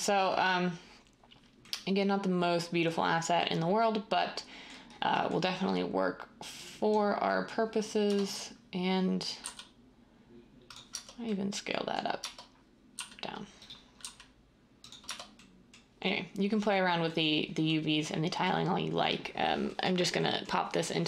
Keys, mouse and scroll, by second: 8.0 Tab, 9.5 s, 10.9 Tab, 12.1 Tab, 12.9 typing, 14.0 s.